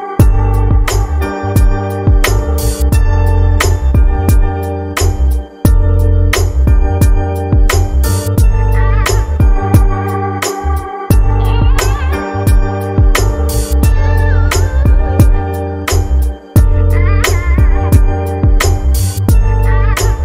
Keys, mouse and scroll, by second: 2.7 click, 9.1-9.6 drag, 10.6-11.1 scroll down 4, 12.5 shift+middle click, 12.6 click, 14.8 click, 17.1-18.5 drag, 18.5 scroll up 2, 19.1 scroll down 1, 20.0 shift+a.